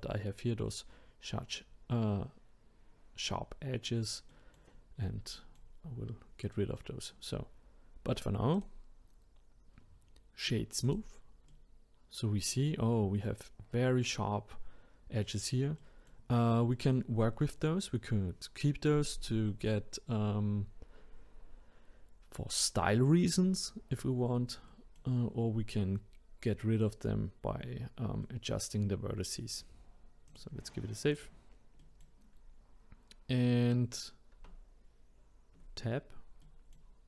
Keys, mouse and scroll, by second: 4.3-8.6 middle drag, 8.6-11.5 right drag, 11.5-14.5 middle drag, 15.8-27.7 middle drag, 28.2-30.3 middle drag, 30.3-31.8 drag, 31.8-34.3 middle drag, 34.3 Tab, 36.4-37.0 middle drag.